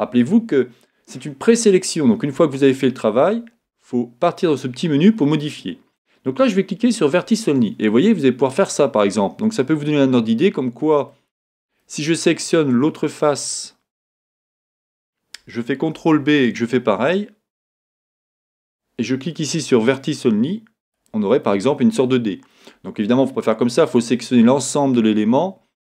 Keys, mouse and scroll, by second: 7.2 click, 8.0-13.4 middle drag, 12.6-13.4 scroll down 2, 13.4 click, 13.9 scroll down 2, 15.9 ctrl+b, 18.6 click, 20.9 click, 21.4-25.8 middle drag.